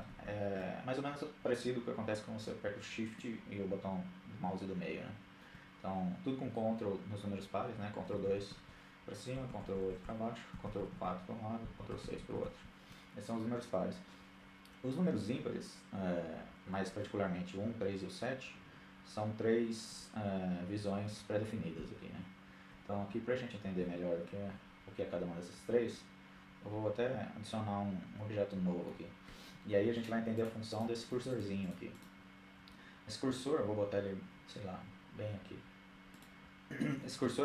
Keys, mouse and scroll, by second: 2.3-3.7 middle drag, 7.1-7.5 ctrl+KP_2, 8.4-8.9 ctrl+KP_8, 9.1 ctrl+KP_8, 9.6 ctrl+KP_4, 10.0 ctrl+KP_4, 10.2 ctrl+KP_4, 10.7-11.6 ctrl+KP_6, 19.1 KP_1, 19.8 KP_3, 20.9 KP_7, 21.8 KP_1, 23.7 KP_3, 25.0-26.4 middle drag, 29.1-32.3 drag, 35.3-36.4 drag.